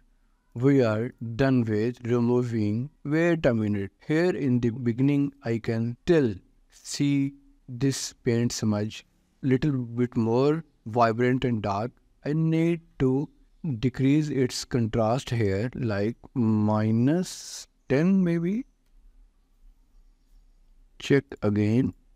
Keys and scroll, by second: 16.9 1, 17.2 0, 18.8 Return.